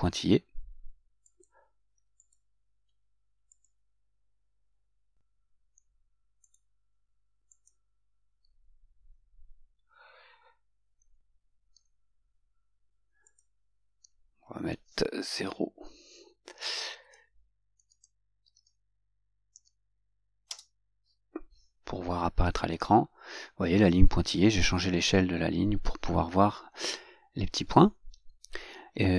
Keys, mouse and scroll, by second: 3.7 click, 6.7 click, 7.7 click, 13.5 click, 20.7 Return.